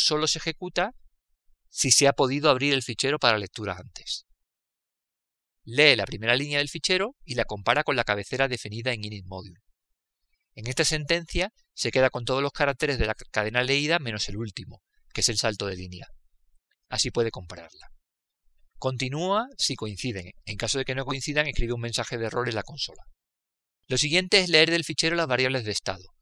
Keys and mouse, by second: 0.2-3.1 drag, 7.2-12.6 drag, 13.0 click, 17.9 click, 19.5-22.4 middle drag, 22.4-25.1 drag, 26.0 click.